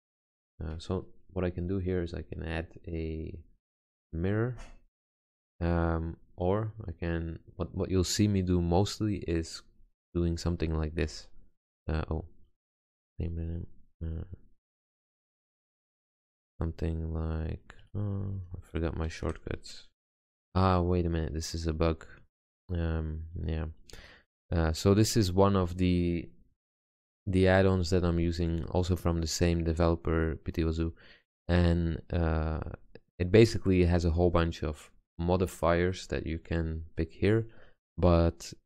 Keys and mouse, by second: 8.1-9.3 middle drag, 9.3-11.2 drag, 11.2 ctrl+shift+q, 13.0-13.4 drag, 14.2 Tab, 16.2 shift+q, 18.9 ctrl+shift+q.